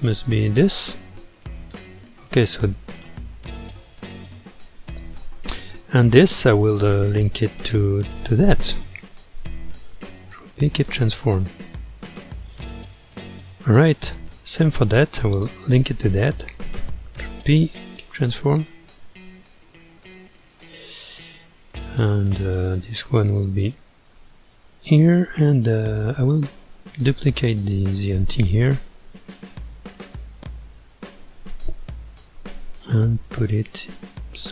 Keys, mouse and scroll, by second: 0.1 click, 1.8 click, 2.7 g, 7.6 shift+click, 9.4 ctrl+p, 11.4-12.2 scroll down 4, 12.2-14.0 middle drag, 14.0 click, 15.0 shift+click, 16.8 ctrl+p, 21.2 click, 22.6 click, 23.9-26.9 middle drag, 27.0 click, 27.6 click, 28.8 KP_1, 29.6 ctrl+KP_1, 33.1 shift+d.